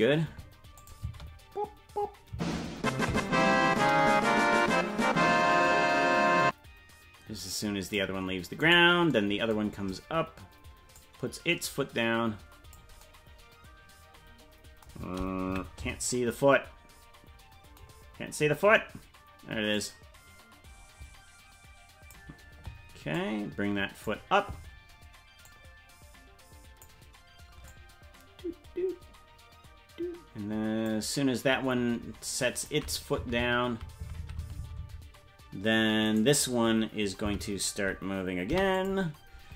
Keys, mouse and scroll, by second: 0.8 click, 1.0 space, 3.8-8.0 drag, 8.8 right click, 10.9-12.8 drag, 15.4 KP_Decimal, 18.1-19.7 scroll down 1, 19.7-22.2 drag, 19.7-20.9 scroll down 6, 23.2 click, 25.4-26.9 drag, 27.7-31.0 drag, 32.4 click, 33.3 Right, 36.2 Right, 36.2 right click, 37.3 Right, 38.5 i.